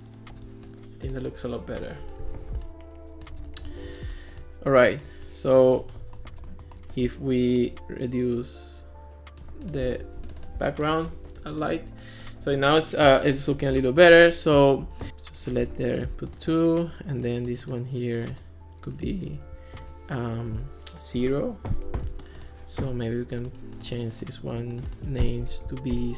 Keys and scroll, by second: 15.7 2, 21.2 0, 25.5 Right, 26.0 BackSpace.